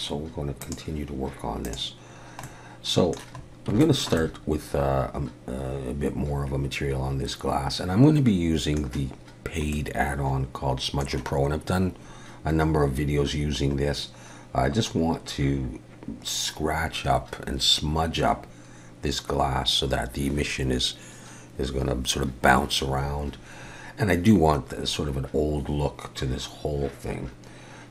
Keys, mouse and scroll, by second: 1.6 click, 2.1-2.4 scroll down 1, 2.4 middle click, 3.4-3.8 scroll up 2, 3.8 shift+middle click, 4.2 middle click, 9.7 middle click.